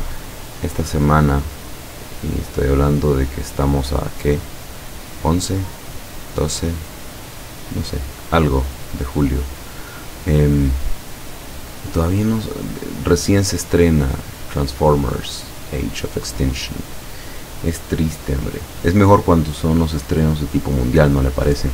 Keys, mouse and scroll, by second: 0.9 click, 3.0 click, 8.4 click, 9.7 click, 14.7 click, 16.5 click.